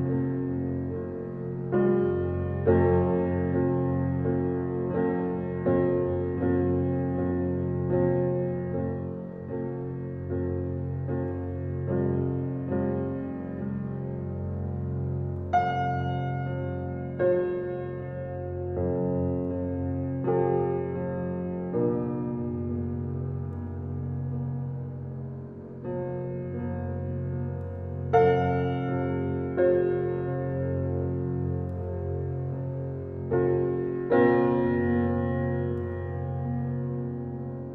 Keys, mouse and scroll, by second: 0.6 alt+click, 7.0 click, 11.0 alt+click, 11.4 alt+right click, 12.2 alt+click, 23.1 click, 25.7-28.2 scroll down 1, 28.2 click, 35.0 scroll up 1, 36.6 click.